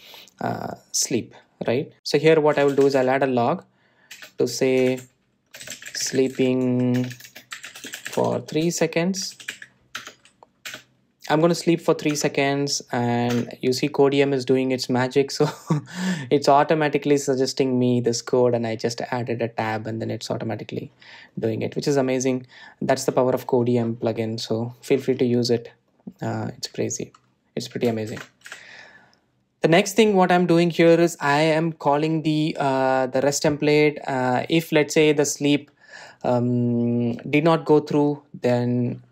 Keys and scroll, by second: 5.5 Return, 11.3 Tab, 29.8 Delete.